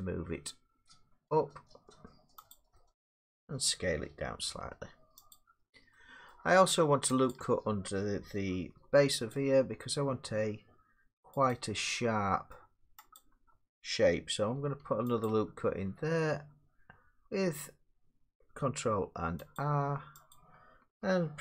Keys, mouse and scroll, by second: 2.5 click, 3.3 middle click, 4.5 s, 5.3 click, 6.3 middle click, 7.3 click, 8.8 ctrl+r, 9.4 click, 11.5 click, 12.5 middle click, 13.2 click, 14.6 ctrl+r, 15.3 click, 19.6 click, 20.4 click.